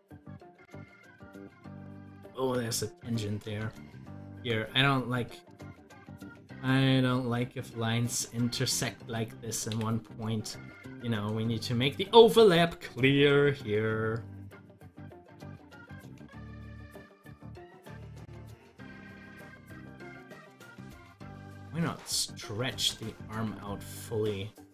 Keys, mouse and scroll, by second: 5.0 scroll up 1, 10.0 typing, 10.9 scroll down 1, 11.3-15.0 middle drag, 19.5-21.7 drag.